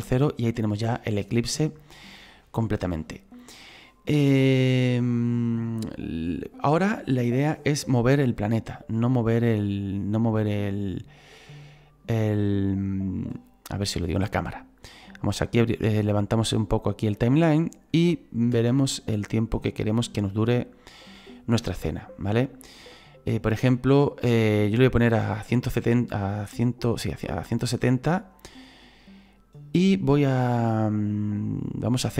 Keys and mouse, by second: 8.3 right click, 15.9 click, 18.5 space, 25.5 space.